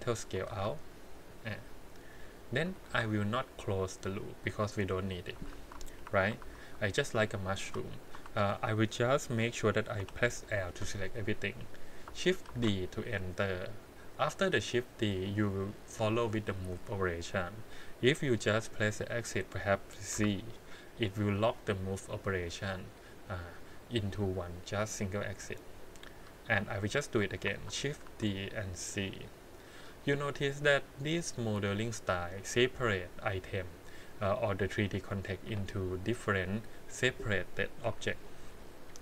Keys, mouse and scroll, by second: 0.1 alt+click, 0.5 s, 1.5 click, 2.2 middle click, 2.8 shift+z, 4.4 middle click, 5.5 shift+z, 5.9 KP_1, 6.4 shift+z, 7.6 2, 7.6 3, 8.1 3, 8.4 click, 10.0 l, 12.5 shift+d, 26.4 shift+middle click, 27.5 shift+d, 30.0 click, 30.4 scroll down 2, 30.8-32.1 middle drag, 32.4 click, 32.8 click, 33.3 click, 33.5 middle click, 33.8 click, 34.3 click, 34.9 click, 37.8 KP_1, 38.5 scroll up 1.